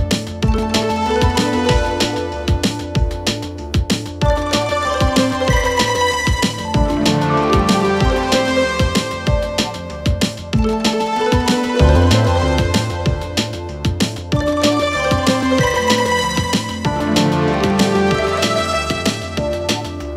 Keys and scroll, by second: 7.2 Delete, 8.7 ], 10.5 ctrl+z, 13.9 ], 15.6 4, 19.7 ..